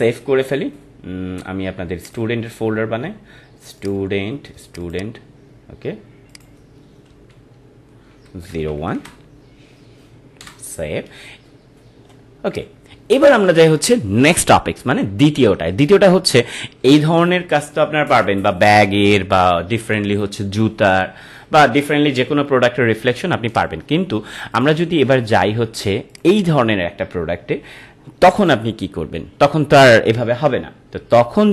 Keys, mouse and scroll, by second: 2.0 click, 12.5 click, 23.5 click.